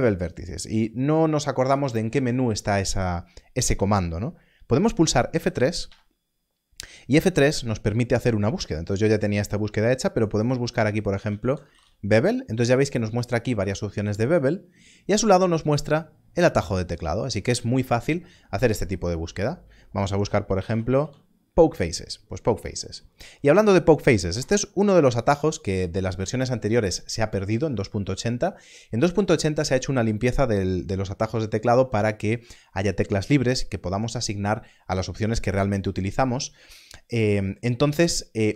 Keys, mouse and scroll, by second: 5.8 F3, 11.2-11.8 typing, 18.8 l, 20.1 click, 20.5 p, 20.6 o, 20.8 k, 21.0 e, 24.3 Escape.